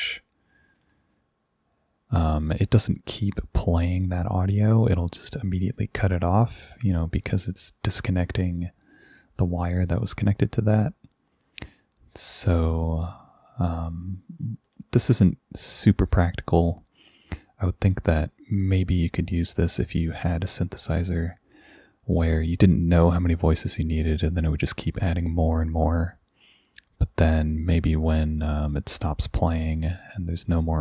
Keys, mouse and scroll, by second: 0.8 click, 14.7 click, 15.7 click.